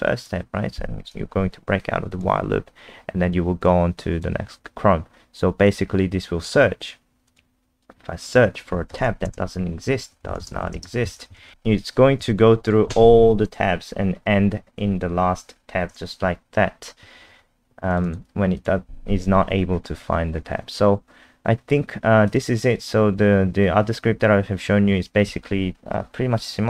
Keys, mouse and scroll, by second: 2.7 scroll up 1, 3.7 click, 9.3-11.9 typing, 12.2 Return, 17.2 super+2, 17.9 click, 18.0 click, 18.6 click, 19.8-21.4 scroll up 6, 22.2 click, 23.9 scroll up 1, 24.0-25.1 scroll down 2.